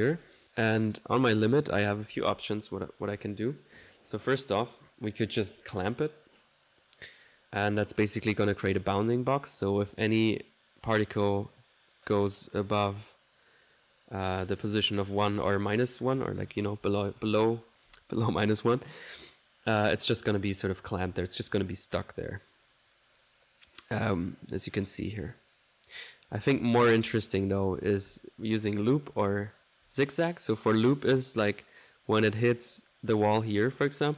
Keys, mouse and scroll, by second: 0.0-0.9 typing, 0.1 Escape, 0.4 click, 0.9 click, 1.2 middle click, 5.0 click, 5.3 click, 5.8-8.2 drag, 19.1-22.9 drag, 23.2 click, 24.1 click, 24.6-30.8 drag.